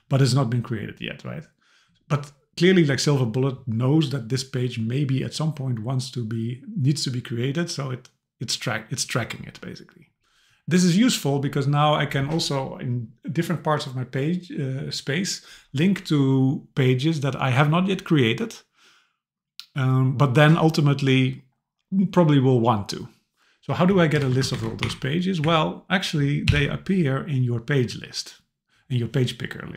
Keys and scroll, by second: 24.2 super+Right, 24.5 shift+super+Left, 24.8 Delete, 25.4 Up, 26.5 super+k.